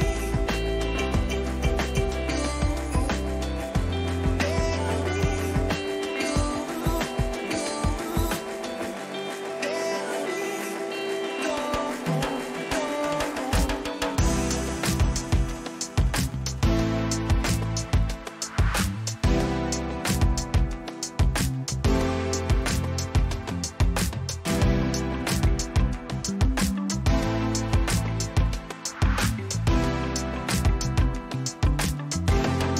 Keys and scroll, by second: 0.5 ctrl+-, 5.2 ctrl+t, 6.1 Return, 8.7 ctrl+alt+z, 10.4 Return, 11.6 ctrl+alt+z, 17.3 Return, 26.7 Return, 27.5 ctrl+-, 32.0 ctrl+alt+z.